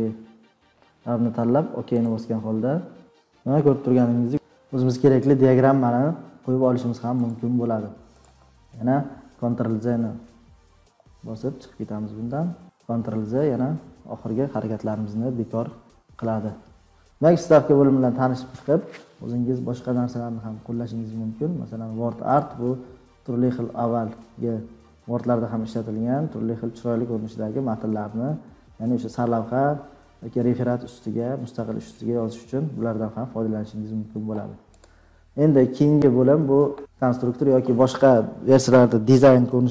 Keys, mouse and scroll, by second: 2.1 click, 4.0 click, 4.0-4.5 scroll down 3, 7.3 click, 8.2 click, 11.7 ctrl+z, 12.1 ctrl+z, 13.7 ctrl+z, 14.3 ctrl+z, 14.9 ctrl+z, 15.4 ctrl+z, 16.3 ctrl+z, 17.1 click, 17.1-17.5 scroll, 17.7 click, 22.3 click, 35.0 click.